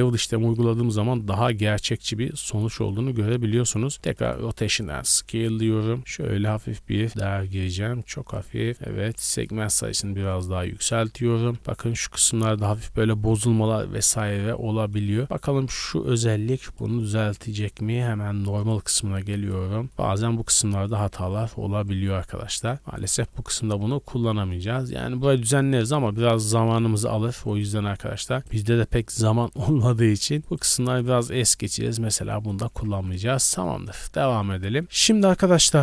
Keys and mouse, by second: 1.0 click, 1.4-10.3 drag, 3.9 ctrl+a, 10.4 a, 10.6 a, 11.3 shift+middle click, 11.5 shift+b, 12.4 drag, 16.0-16.7 middle drag, 16.7-19.6 drag, 19.6-20.9 middle drag, 20.9-22.5 drag, 21.1 Tab, 21.7 Tab, 22.1 Tab, 22.3 Tab, 22.5 middle drag, 22.7 click, 23.2 n, 23.8 n, 24.6-27.5 drag, 26.5 Tab, 27.3 Tab, 27.5 middle click, 27.6 click, 27.8 Tab, 28.4 middle click, 28.4 3, 28.9 click, 29.7 g, 31.0 Tab, 31.7 a, 31.9 a, 32.7 a, 32.9 a, 33.2-34.0 shift+middle drag, 34.6-35.8 shift+drag.